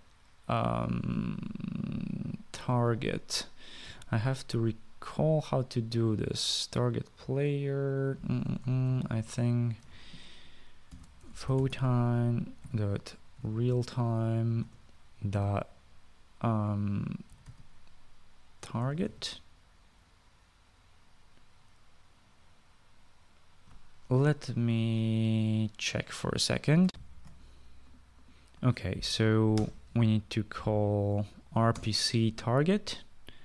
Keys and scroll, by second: 3.1-5.9 typing, 9.1 BackSpace, 9.2 BackSpace, 11.4-14.7 typing, 15.4 Return, 15.9-16.6 typing, 17.8-20.3 typing, 27.8 shift+F9, 27.8 Down, 27.8 Return, 27.8 ;, 27.8 BackSpace, 30.4 r, 32.6 Return.